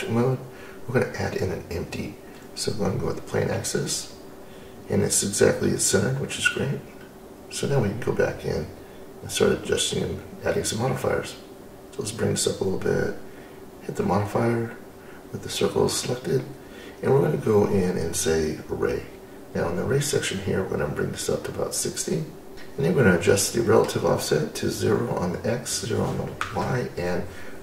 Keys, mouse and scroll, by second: 4.3 click, 4.8 click, 10.9 click, 13.2 click, 14.2-17.2 drag, 19.6-22.7 drag, 26.8-27.6 drag.